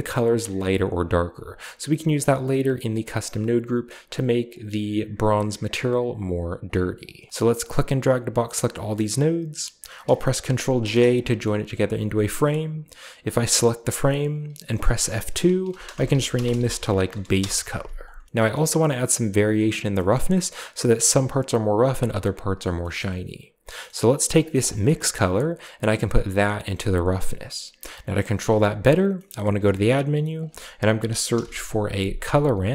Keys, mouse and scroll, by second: 3.0 shift+right click, 4.3-6.6 drag, 6.5 right click, 6.9 click, 7.3-8.0 scroll down 1, 7.3 a, 7.4-9.4 drag, 10.7 ctrl+j, 12.3 click, 13.1-14.3 drag, 14.6 F2, 15.5-18.1 typing, 17.9-18.3 scroll down 1, 18.1-19.2 shift+middle drag, 19.2 scroll down 1, 19.8 shift+middle click, 22.4 scroll down 1, 22.6 middle click, 23.7-24.4 scroll up 1, 24.4 click, 24.8-25.7 scroll down 1, 25.7-27.6 drag, 27.9-29.0 scroll down 1, 28.5 middle click, 29.1-30.2 scroll up 1, 29.2 shift+middle click, 29.4 shift+a, 30.2 click, 31.2 typing.